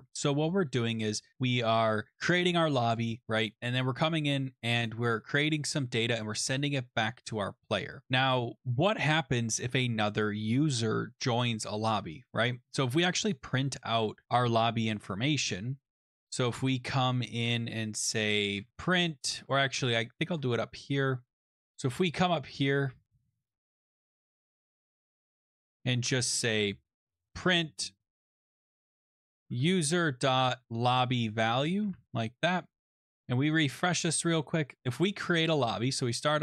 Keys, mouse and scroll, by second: 0.4 click, 2.9 click, 3.1 click, 4.8 click, 5.0 click, 7.9 click, 8.0 click, 13.3 click, 14.0 Return, 18.2-19.8 typing, 21.4 click, 21.7 click, 22.2 Page_Up, 24.0 scroll, 24.9 click, 25.1 click, 25.3 click, 25.5 Tab, 26.9-32.5 typing, 33.3 click, 35.6 click, 36.3 click.